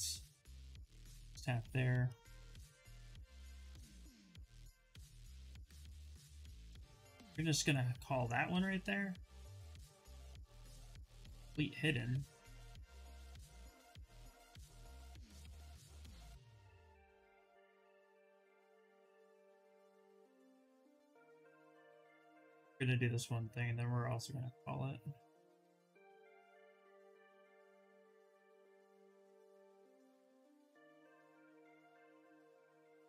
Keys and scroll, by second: 10.1 2, 16.8 w, 27.2 q, 29.8 ctrl+z, 29.9 ctrl+z.